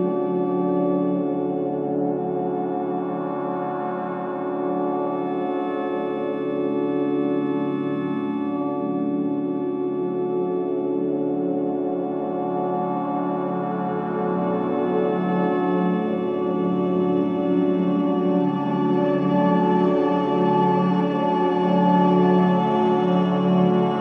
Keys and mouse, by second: 0.6-1.2 drag, 5.3 click, 9.2 typing, 11.0 shift+click, 12.1 shift+click, 13.8 shift+click, 15.2 i, 16.4-17.0 drag, 17.9-20.4 drag, 18.6 typing, 21.5 typing, 23.3 ctrl+z, 23.7-24.0 typing.